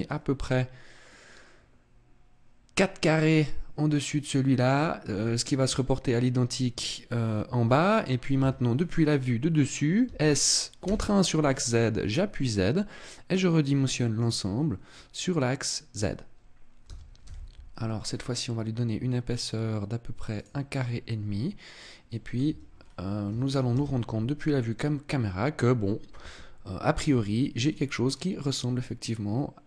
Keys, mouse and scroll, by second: 0.1 scroll up 4, 1.1-1.7 scroll down 1, 4.5-5.8 scroll down 2, 5.8-7.2 scroll down 2, 7.2-7.5 scroll down 1, 8.4 KP_1, 10.1 s, 14.3 click, 14.6-15.9 scroll up 6, 16.9 s, 21.8 click, 21.8 middle click, 22.5 Tab, 22.7-23.5 scroll down 6, 23.7 KP_0, 24.5 scroll up 2, 27.7 middle click.